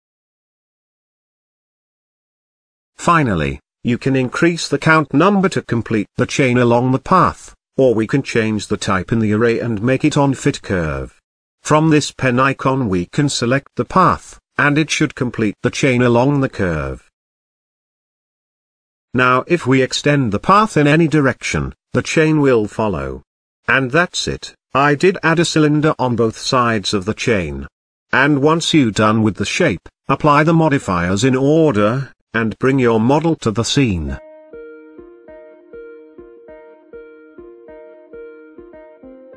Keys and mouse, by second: 0.4 click, 1.3 Tab, 3.9 click, 5.3-6.8 drag, 9.3-11.9 drag, 14.1 click, 17.7-19.1 middle drag, 19.4 shift+drag, 19.5 shift+middle drag, 20.5 click, 21.4 Tab, 22.8 click, 24.4 e, 29.9 click, 30.8 middle click, 31.9 shift+middle click, 32.9 Tab, 33.6-33.9 middle drag, 37.0 middle click.